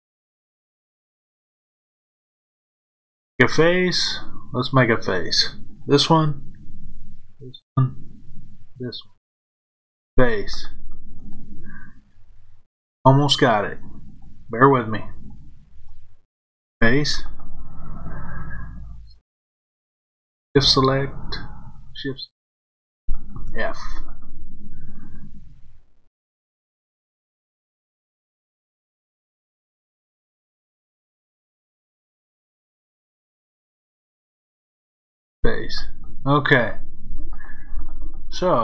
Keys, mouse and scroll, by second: 1.1 shift+click, 2.6 f, 5.7 click, 7.2 shift+click, 8.4 shift+click, 9.9 f, 11.1 click, 14.0 shift+click, 15.2 shift+click, 16.6 f, 18.1 click, 20.3 shift+click, 21.8 shift+click, 23.3 f, 27.7 click, 31.0 shift+click, 32.8 shift+click, 35.1 f.